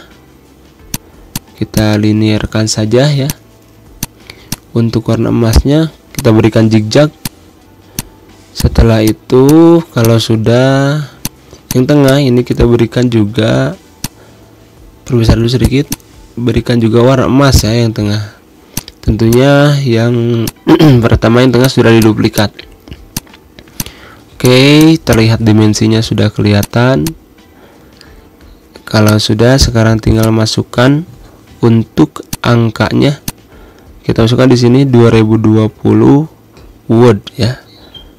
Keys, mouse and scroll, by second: 1.7-11.0 drag, 12.2 Pause, 13.8-15.4 shift+drag, 16.2 ctrl+c, 17.3-18.5 shift+drag, 19.7 i, 20.2 click, 22.0 space, 22.1 click, 22.2 space, 22.9 click, 23.3 z, 23.5 click, 24.7 space, 24.9 click, 25.0 space, 26.4 click, 27.3-28.1 typing, 28.2 ctrl+a, 28.8-32.1 drag, 32.1 alt+click, 32.7-38.1 typing, 33.0 click, 33.2 ctrl+a.